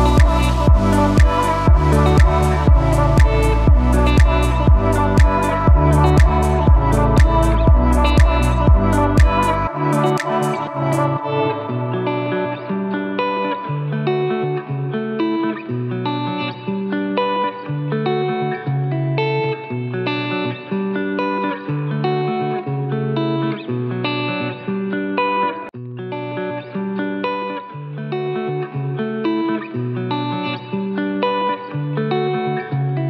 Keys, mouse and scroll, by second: 0.5 scroll down 1, 0.7-2.7 typing, 1.1 click, 1.7 click, 2.1 click, 2.8 click, 5.8 ctrl+z, 6.5 click, 6.7-10.2 typing, 6.8 click, 7.2 click, 9.0 click, 11.6 click, 17.6 click.